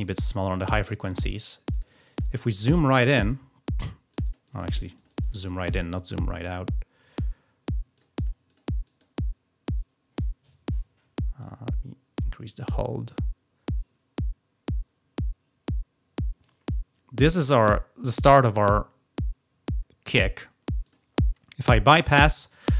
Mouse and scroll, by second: 1.6 click, 2.0 click, 4.0 click, 4.4-5.2 scroll up 4, 7.8 click, 8.0 click, 8.3 click, 8.7 click, 11.3 click, 14.1 scroll down 2, 20.7 click.